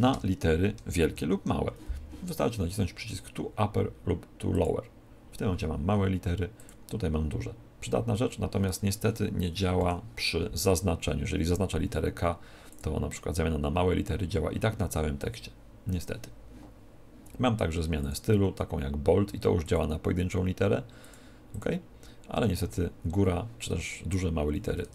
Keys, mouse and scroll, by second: 0.0-1.0 typing, 4.4 click, 6.5 click, 9.7 shift+Right, 12.6 click, 17.9 click, 19.6 click, 21.4 click, 24.8 Tab.